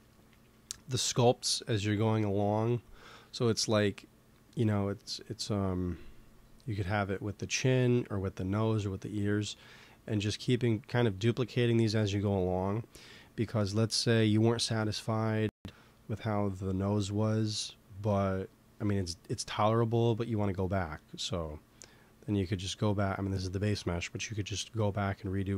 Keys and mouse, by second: 21.9-24.2 drag.